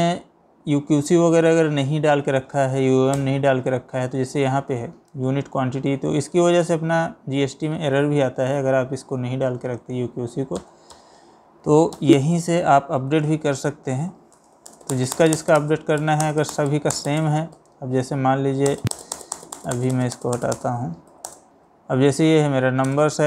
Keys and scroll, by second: 3.2 ctrl+Return, 10.6 Escape, 13.3 space, 14.1 Down, 14.4-17.3 typing, 14.6 Down, 14.9 Down, 15.1 Down, 15.4 Down, 16.0 Down, 16.5 Down, 16.8 Down, 17.1 Down, 17.6 Up, 18.7-21.3 typing, 18.8 Down, 19.1 Down, 19.3 Down, 19.5 Down, 19.7 Down, 19.9 Down, 20.3 Down, 20.5 Down, 22.9 space.